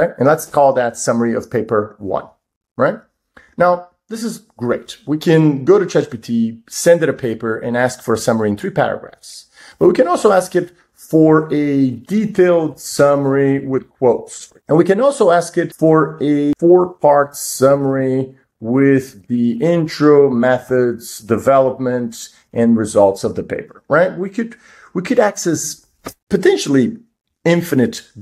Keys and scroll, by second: 9.8 super+Right, 15.1 super+Right.